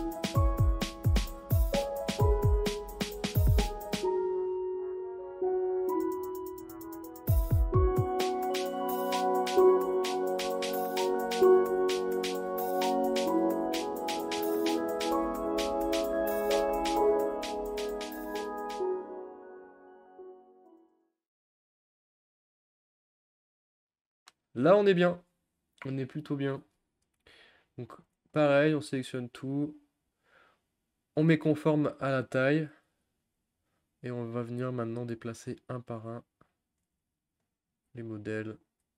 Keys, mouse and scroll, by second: 0.1 shift+middle click, 0.2 scroll up 7, 0.3 shift+middle click, 0.9 Tab, 1.0 Tab, 1.1 middle click, 1.8 click, 2.2 u, 2.3 a, 2.5 u, 3.6 a, 4.1-5.2 drag, 5.2-5.8 scroll down 9, 5.9-7.1 shift+middle drag, 7.1 click, 7.9 r, 8.3 g, 9.6 r, 10.0 ctrl+z, 10.0 ctrl+z, 10.1 ctrl+z, 10.3 click, 10.5 r, 10.9 g, 11.5 click, 11.7 click, 11.8 click, 12.0 shift+middle click, 12.3 Tab, 12.3 click, 12.5 click, 12.6 Tab, 12.7 click, 12.8 scroll up 6, 12.8 scroll down 2, 12.9 shift+middle click, 13.3 click, 13.4 click, 13.5 alt+shift+click, 13.8-15.5 typing, 14.2 scroll up 1, 14.2 Tab, 14.3 shift+middle click, 14.3 scroll down 3, 14.5 click, 14.6 click, 14.7 click, 14.8 shift+click, 15.0 shift+click, 15.2 Tab, 17.5 a, 17.8 click, 18.7 ctrl+z, 18.8 g, 19.0 click, 19.0 g, 19.3 shift+middle click, 19.4-19.7 scroll up 1, 19.7 click, 20.2 shift+middle click, 20.3 scroll up 2, 20.4 middle click, 20.6 shift+middle click, 21.5 click, 21.6 click, 21.8 Tab, 21.8 middle click, 22.0 Tab, 22.1 click, 22.2 click, 22.2 alt+shift+click, 22.5 u, 22.6 middle click, 22.9 click, 23.3 u, 23.4 a, 23.5 scroll down 4, 23.7 u, 28.0 a, 30.1-32.8 drag, 32.8 g, 34.9 click, 35.1 g, 36.6 click, 36.8 g, 37.7 click, 37.8 g, 38.8 g.